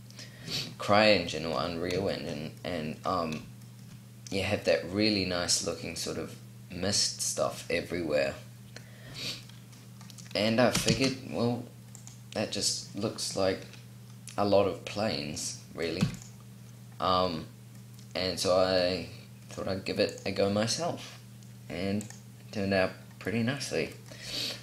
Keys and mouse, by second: 0.7-2.3 middle drag, 5.6 middle click, 10.8 shift+a, 15.9 x, 16.9 middle click.